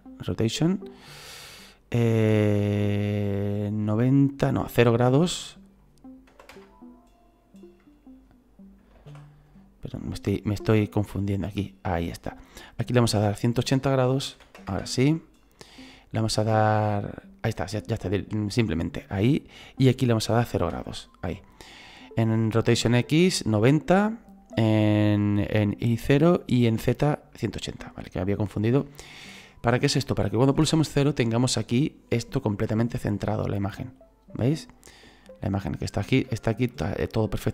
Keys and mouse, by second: 0.2 click, 2.2 KP_9, 2.3 KP_0, 2.6 Return, 5.6 click, 6.3 KP_0, 6.5 Return, 10.3 click, 13.3 click, 14.2 KP_1, 14.3 KP_8, 14.7 Return, 14.7 KP_Enter, 19.6 click, 20.5 KP_0, 20.7 Return, 27.3 middle click, 28.8 middle click, 30.6 KP_0, 34.5 middle click, 36.3 shift+middle click.